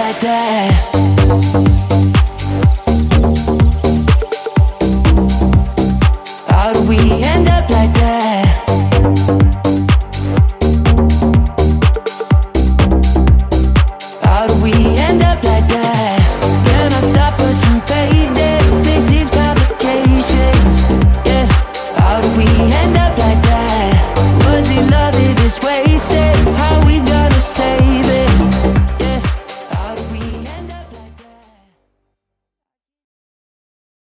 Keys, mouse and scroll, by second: 0.1 d, 2.9 a, 8.6 d, 14.5 shift+d, 20.4 s, 21.0 shift+a, 22.8 shift+d, 26.6 click, 28.6-33.1 drag.